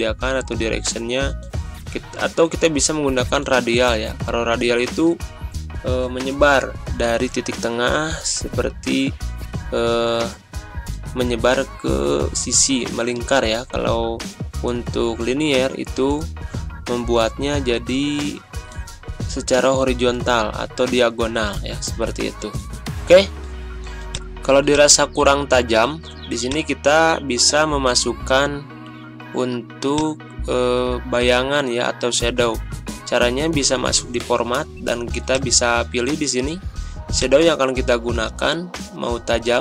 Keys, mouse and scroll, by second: 11.0 click, 25.1 ctrl+scroll up 1, 26.5-29.9 drag.